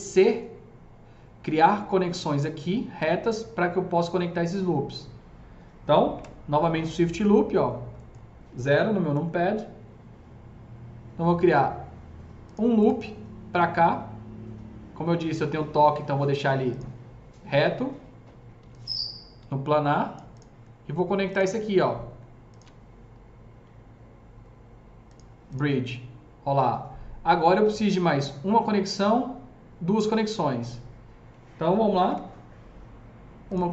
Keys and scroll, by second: 8.9 KP_0, 18.6 s, 32.1 KP_0.